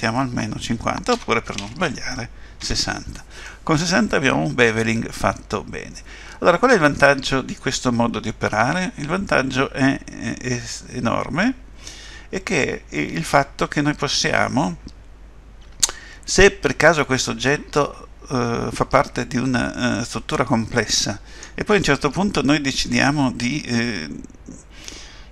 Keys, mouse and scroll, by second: 3.4 middle click.